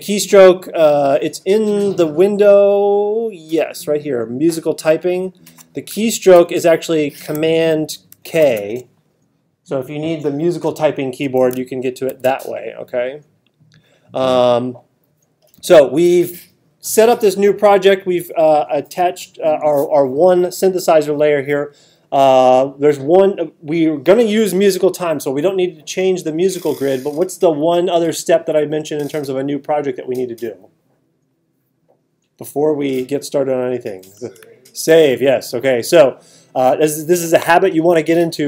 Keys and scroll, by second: 6.3 alt+super+8, 7.9 alt+super+=, 12.1 alt+super+8.